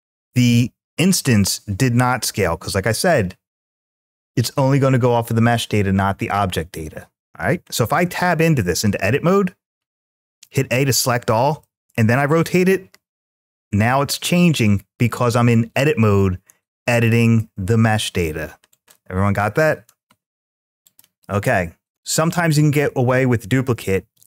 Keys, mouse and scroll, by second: 2.2 ctrl+z, 7.7 Tab, 10.2 a, 11.5 r, 16.7 click, 18.5 click, 19.8 Tab, 20.7 click.